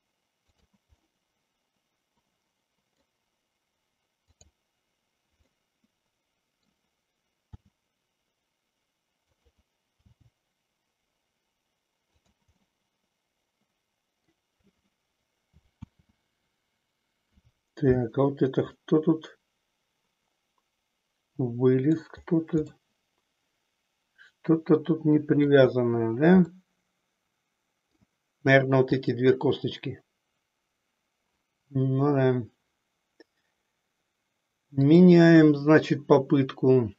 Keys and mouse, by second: 0.5 click, 1.0-3.2 middle drag, 4.4 click, 5.5-6.8 middle drag, 7.7 r, 10.0 g, 12.7-14.4 middle drag, 16.1 ctrl+z, 18.8-22.0 middle drag, 22.9-25.7 middle drag, 26.7-27.9 middle drag, 28.9 click, 34.8-36.9 drag.